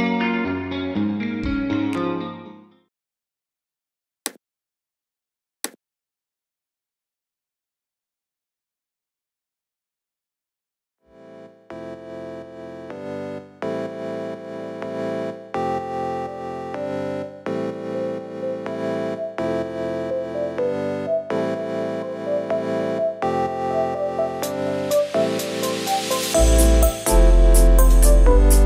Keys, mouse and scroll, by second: 21.3 scroll up 2, 22.8 scroll down 2, 23.5 space, 23.5 click, 24.6-26.4 alt+middle drag.